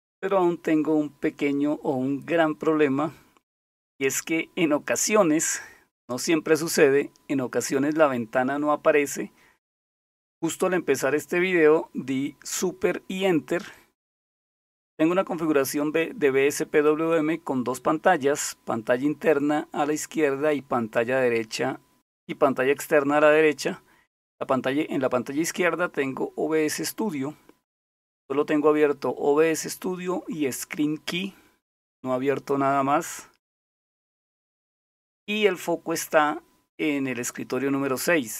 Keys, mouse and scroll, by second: 30.3-32.1 typing.